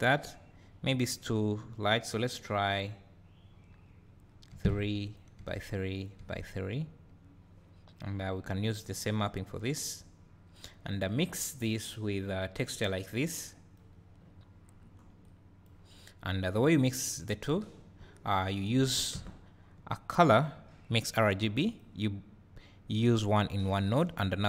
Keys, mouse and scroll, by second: 4.8-6.5 drag, 8.7-10.7 drag, 13.9 click, 15.2 click, 16.7-18.0 drag, 18.4-18.7 drag, 21.8 click, 23.0-24.4 drag.